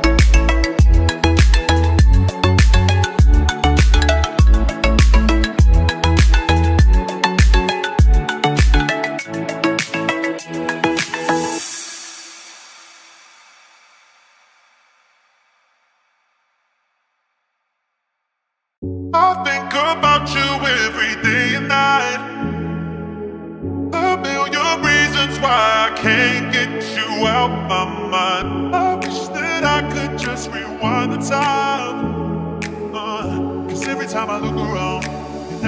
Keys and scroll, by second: 3.9 c, 5.6 ctrl+z, 8.0 c, 9.4 shift+F2, 9.9 Escape, 16.2 ctrl+z, 17.7 ctrl+z, 18.5 Delete, 20.1 ctrl+z, 21.7 ctrl+z, 22.2 shift+Page_Up, 25.7 shift+Page_Up.